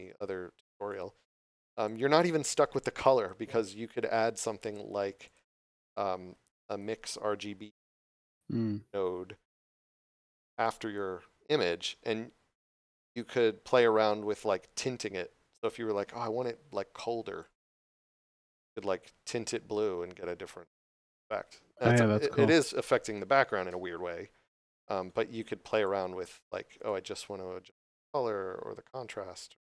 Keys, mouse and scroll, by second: 0.9 click, 4.6 click, 6.8 m, 8.7 click, 13.7 click, 16.2 click, 21.9 scroll down 1, 25.8 click.